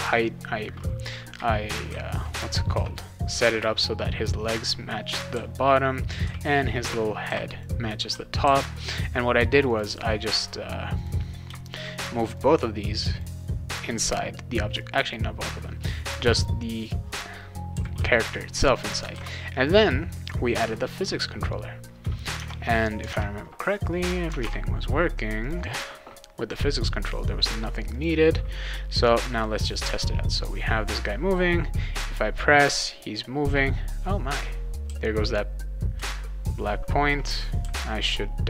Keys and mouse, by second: 0.9-3.3 right drag, 1.3 a, 1.9 w, 2.4 q, 2.7 w, 5.1-7.6 right drag, 5.3-8.4 typing, 8.1 right click, 9.7 click, 10.4 click, 11.0 click, 11.7 shift+click, 12.3 click, 14.1 click, 14.8 click, 16.3 click, 17.4-18.5 right drag, 17.5-18.4 typing, 19.1 ctrl+s, 19.6 click, 20.9 click, 22.3 alt+Tab, 23.1 alt+Tab, 24.4 alt+Tab, 25.4 click, 27.9 click, 32.0 w, 34.9 w, 35.9 a, 37.1 w, 37.6 d.